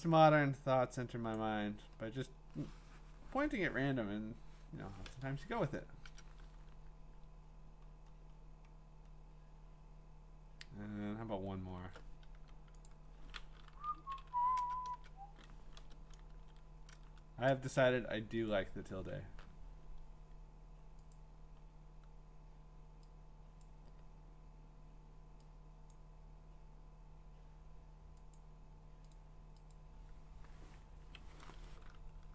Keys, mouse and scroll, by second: 1.3 click, 5.9 click, 6.1 ctrl+Return, 6.7-8.8 scroll, 9.7 scroll, 10.4-11.9 scroll, 12.3 t, 12.9 click, 13.7 Down, 14.0 Down, 14.2 Down, 14.6 Return, 14.9 Return, 15.8 BackSpace, 16.3 ctrl+v, 16.9 Return, 21.1 click, 21.6 scroll, 23.6 click, 25.9 click, 28.4 click, 29.1 click, 29.7 click.